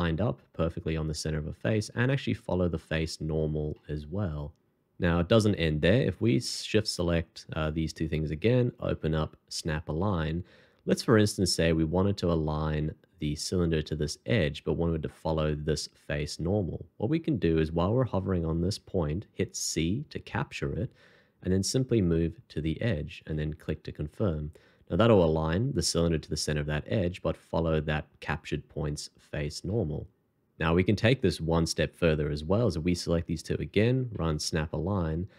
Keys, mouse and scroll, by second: 3.7 middle click, 7.5 shift+click, 8.7 alt+t, 19.9 c, 24.2 middle click, 29.7 middle click, 32.6 shift+click, 33.7 alt+t.